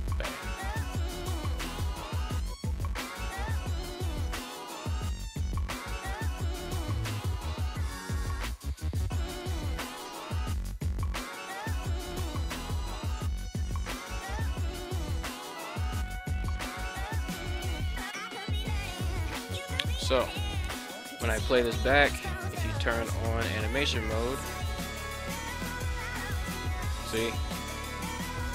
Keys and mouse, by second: 2.0 click, 5.3 right click, 5.7 r, 5.8 r, 7.2 click, 9.8 right click, 10.6 right click, 12.4 g, 13.6 click, 14.7 right click, 15.0 g, 15.8 click, 17.6-18.8 drag, 19.0-19.3 drag, 23.1 click, 25.3 space, 28.1 space, 28.3-28.5 drag.